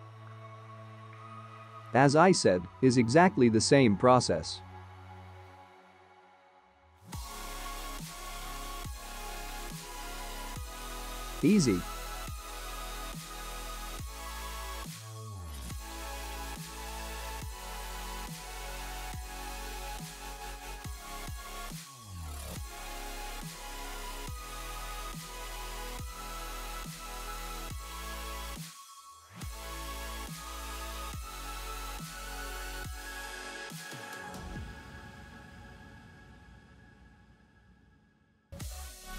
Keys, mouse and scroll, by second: 5.1-5.8 scroll up 3, 5.8-6.7 scroll up 2, 6.9 click, 8.0 click, 8.4 space, 25.8 KP_0, 27.0 middle click, 27.5 `, 27.9 `, 28.3 `, 28.5-29.0 scroll down 4.